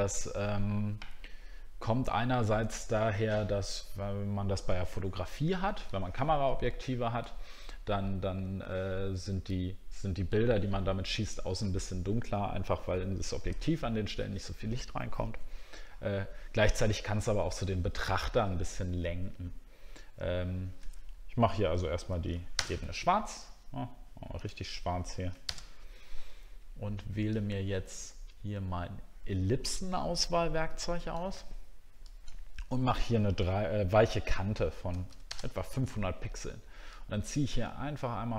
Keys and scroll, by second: 22.5 ctrl+BackSpace, 25.5 ctrl+BackSpace.